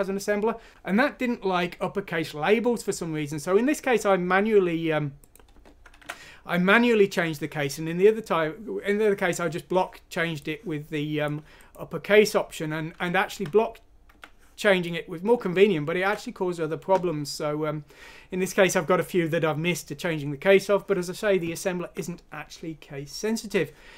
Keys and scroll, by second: 6.0 alt+Tab, 16.0 alt+Tab.